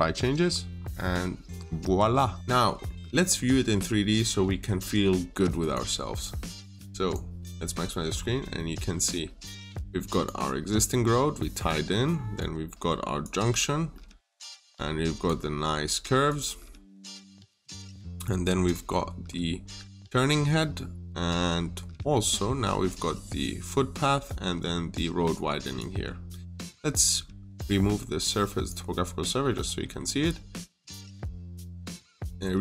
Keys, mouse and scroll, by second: 0.2-0.6 scroll down 1, 1.6 middle click, 2.3 scroll down 1, 2.4 middle click, 5.4 click, 7.5-7.9 scroll up 1, 8.4 middle click, 9.6 click, 10.3-10.7 scroll up 1, 10.7 middle click, 12.2 click, 13.7 middle click, 14.5 click, 17.3-17.7 scroll down 1, 17.7 click, 18.7 scroll up 1, 20.1-20.4 scroll down 1, 20.4 middle click, 21.1-22.1 scroll down 1, 22.1 click, 22.9 scroll up 1, 25.2 click, 25.8-26.4 scroll down 1, 26.4 right click, 28.5 click, 28.9-29.3 scroll down 1, 29.3 middle click, 30.0-30.5 scroll down 1, 30.9 middle click, 32.2-32.6 scroll down 1.